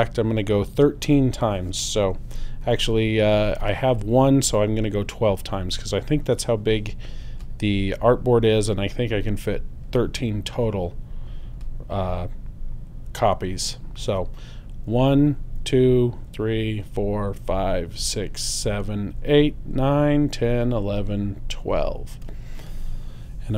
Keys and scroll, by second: 14.9 alt+super+Right.